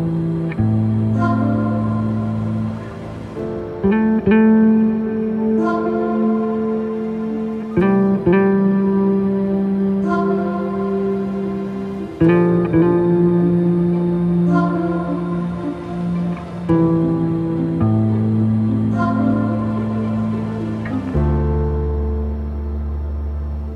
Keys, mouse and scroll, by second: 1.6-4.7 drag, 18.8-22.0 drag.